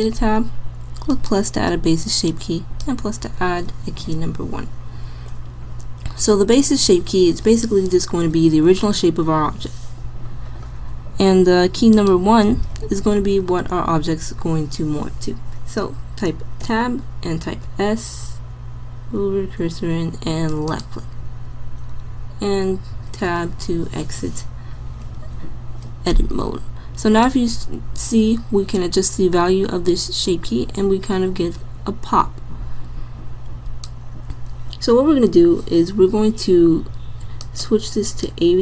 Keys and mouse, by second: 1.1-4.0 drag, 16.6 Tab, 17.7 s, 23.1 Tab, 27.2-29.1 drag, 37.5-38.6 drag.